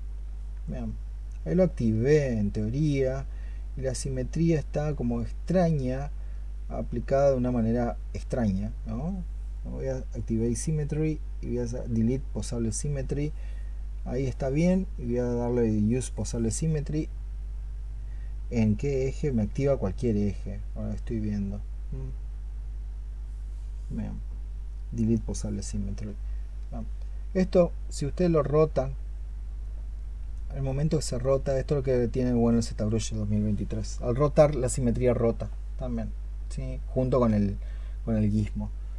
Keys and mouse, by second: 1.1 alt+click, 26.3 alt+click.